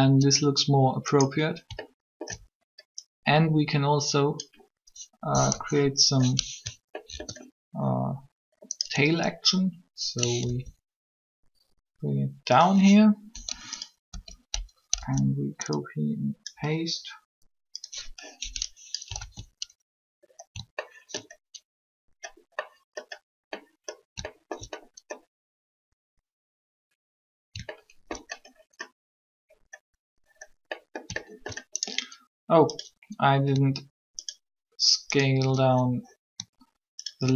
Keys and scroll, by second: 5.2 3, 10.4 ctrl+r, 14.0 Up, 14.5 Up, 15.0 Left, 19.2 alt+a.